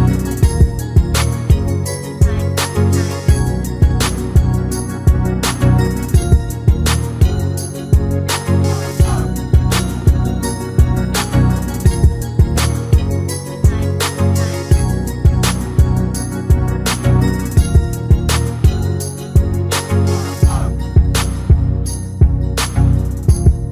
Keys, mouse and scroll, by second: 0.1 scroll up 1, 0.2 2, 3.8 middle click, 3.8 scroll down 3, 4.1 KP_3, 4.2 middle click, 4.6 alt+click, 4.8 3, 4.9 click, 5.4 scroll down 4, 5.8 shift+click, 6.0 shift+click, 6.0 shift+middle click, 6.1 shift+click, 6.3 shift+click, 6.3 scroll down 2, 6.4 shift+middle click, 6.5 scroll up 3, 6.7 shift+click, 6.8 shift+click, 7.0 shift+click, 7.0 shift+middle click, 7.2 shift+click, 7.3 shift+click, 7.4 shift+middle click, 7.5 shift+click, 7.6 shift+click, 7.7 shift+click, 7.8 shift+click, 8.0 shift+middle click, 8.1-8.6 shift+click, 8.2 shift+click, 8.4 shift+click, 8.7 shift+middle click, 8.8 scroll down 5, 8.9 scroll up 6, 9.2 alt+shift+click, 9.7 scroll down 1, 9.8 alt+click, 10.0 alt+click, 10.2 alt+click, 10.2 scroll down 9, 10.8 middle click, 11.2 shift+middle click, 11.2-12.2 scroll up 8, 11.4 middle click, 12.0 click, 12.2 KP_7, 12.3 scroll down 10, 12.5 shift+middle click, 12.6 scroll up 2, 12.6 shift+middle click, 13.1 shift+middle click, 13.4 shift+click, 14.1 scroll down 3, 14.2 scroll up 7, 14.3 shift+middle click, 14.5 shift+middle click, 14.7 shift+click, 14.9 shift+middle click, 15.1 shift+click, 15.6 shift+middle click, 15.8 shift+click, 16.4 shift+middle click, 16.4 shift+click, 16.7 middle click, 17.2 click, 17.6 KP_7, 17.7-18.4 scroll down 13, 17.9 shift+middle click, 18.5 shift+click, 19.0 click, 19.0 scroll up 2, 19.1 click, 19.5 shift+middle click, 19.7 shift+middle click, 19.9 shift+middle click, 19.9 scroll up 2, 20.1 shift+click, 20.4 shift+middle click, 20.5 shift+middle click, 20.8 shift+click, 21.2 shift+middle click, 21.4 shift+middle click, 21.5 shift+click, 22.0 shift+middle click, 22.2 shift+click, 22.7 middle click, 23.2 scroll up 1, 23.5 shift+click.